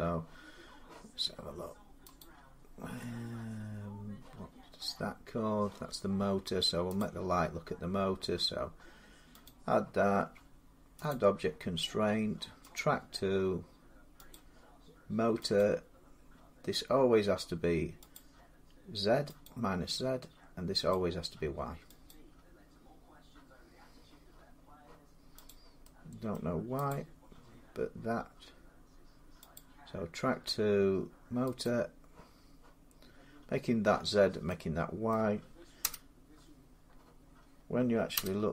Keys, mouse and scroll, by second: 0.7-1.2 scroll down 4, 1.2 scroll down 2, 2.0 click, 4.7 scroll up 4, 4.8 middle click, 6.0 middle click, 6.1 middle click, 6.8 click, 9.3 click, 10.9 click, 12.6 click, 14.2 click, 15.4 click, 18.0 click, 20.7 click, 21.9 click, 25.3 click, 26.2 middle click, 26.7 click, 29.4 click, 31.5 click, 34.0 scroll down 2, 34.5 scroll, 34.9 middle click, 35.7 0, 38.0 0.